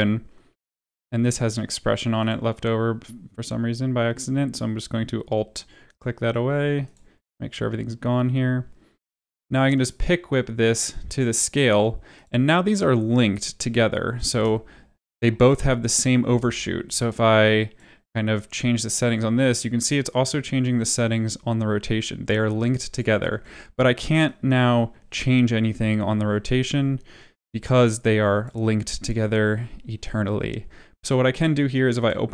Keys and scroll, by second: 14.3 space, 16.2 space, 29.0 ctrl+z.